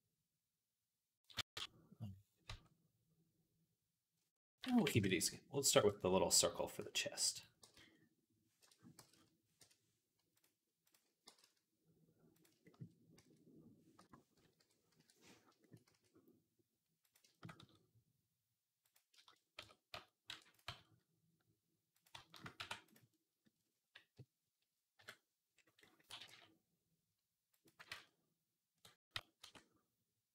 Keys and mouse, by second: 1.3 Tab, 2.3 Tab, 4.4 r, 5.6 KP_1, 6.6 s, 7.4 g, 8.8 g, 10.2-12.2 drag, 11.1 g, 12.2-17.4 shift+middle drag, 13.0 s, 14.4 ., 15.7 s, 17.4 s, 19.4 Tab, 19.8 a, 20.1 e, 20.5 s, 22.4 e, 24.8 KP_Decimal, 25.9 g, 27.8 ctrl+z, 28.9 a, 29.2 e.